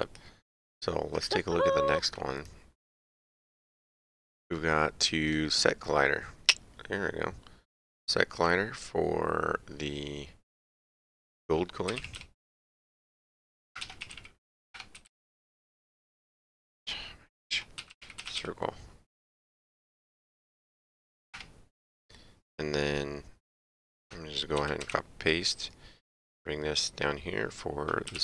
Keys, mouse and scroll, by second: 0.0 ctrl+Page_Down, 0.5 ctrl+Page_Up, 1.1 click, 2.4 ctrl+Page_Down, 3.5 click, 5.3 click, 8.4 click, 11.9 g, 12.0 o, 13.8-15.2 typing, 15.9 Tab, 19.8 shift+Tab, 20.4 Right, 21.3 BackSpace, 24.6 ctrl+c, 24.8 ctrl+v, 28.1-28.2 typing.